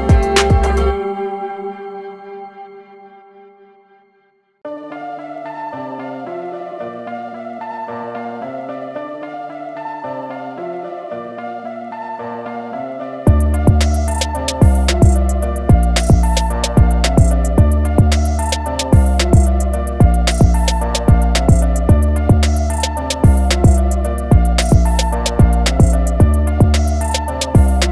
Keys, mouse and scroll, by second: 0.0 click, 0.7 click, 2.7-3.1 alt+scroll down 2, 4.6 click, 7.6 scroll up 1, 8.9 click, 11.1 click, 14.1 ctrl+click, 14.9 ctrl+click, 16.5 click, 18.3 click, 18.8 click, 19.3 click, 20.5 click, 21.5 ctrl+click, 22.1-23.0 super+scroll down 2, 23.0-23.6 alt+scroll down 2, 24.1 click, 26.7 alt+scroll up 1, 27.2-27.9 alt+scroll up 2.